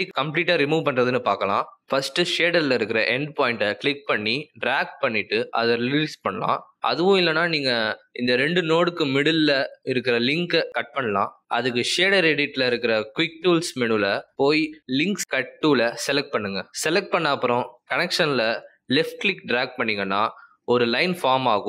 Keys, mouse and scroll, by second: 12.2 click, 14.9 click.